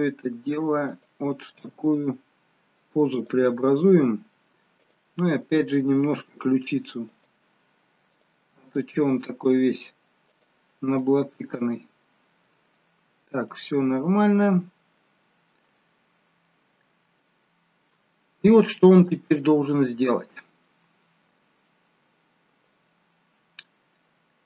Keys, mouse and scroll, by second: 4.8 click, 4.8-6.1 scroll up 8, 6.1 r, 8.7 click, 8.7 r, 10.9 middle click, 12.4-13.0 scroll down 2, 13.0-13.5 scroll down 1, 13.5 middle click, 14.6-15.5 scroll down 1, 15.5 scroll down 1, 15.8 middle click, 16.6-17.1 scroll down 1, 17.1 shift+middle click, 18.2 middle click.